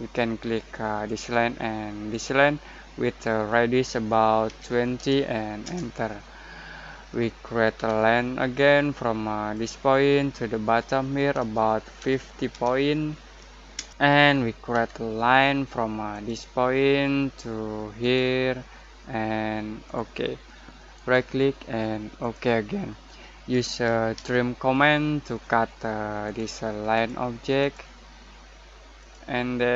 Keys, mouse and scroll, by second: 4.4-4.9 typing, 5.6 Return, 7.7 l, 9.5 click, 12.0-12.5 typing, 13.7 Return, 14.7 ctrl+z, 16.1 click, 18.7 click, 20.9 right click, 24.1 t, 26.2 click.